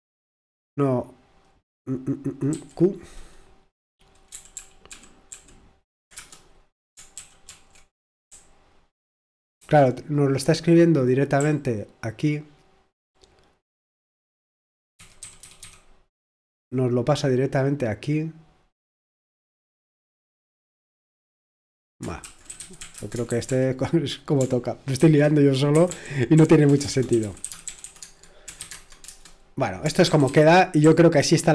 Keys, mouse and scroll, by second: 1.3-2.5 drag, 2.5 q, 4.3 ctrl+p, 4.6 ctrl+p, 4.9 ctrl+p, 5.3 ctrl+p, 6.2 Return, 7.5 ctrl+d, 8.3 c, 22.0-23.3 typing, 23.5 ctrl+p, 24.4 ctrl+p, 25.0 ctrl+p, 28.2-31.5 typing.